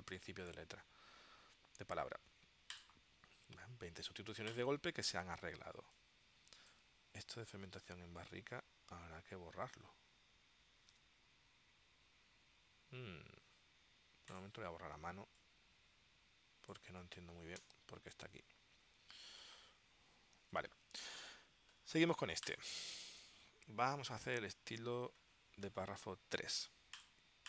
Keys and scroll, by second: 7.7 super+Tab, 11.0 super+Tab, 17.7 BackSpace, 19.5 super+Tab, 20.6 super+Tab.